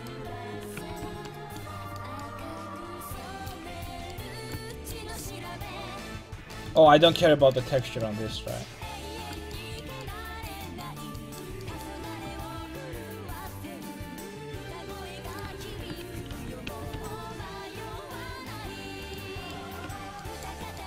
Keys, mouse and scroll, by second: 0.0 right click, 0.3 ctrl+x, 0.6 a, 0.9 ctrl+t, 1.1 a, 3.9 alt+z, 12.2 ctrl+Tab, 13.3 c, 15.8 ctrl+x, 16.0 a, 16.3 ctrl+t, 16.7 a, 16.9 ctrl+t, 17.7 a, 18.2 ctrl+Tab, 20.5 Tab.